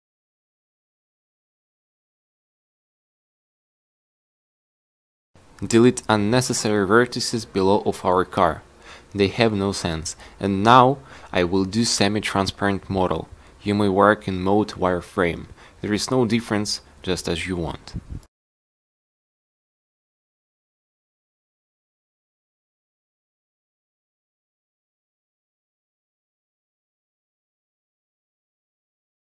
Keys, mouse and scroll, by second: 1.9 click, 2.7 click, 9.0 x, 10.5 x, 11.4 x, 12.6 x, 22.3 Tab, 24.4 z.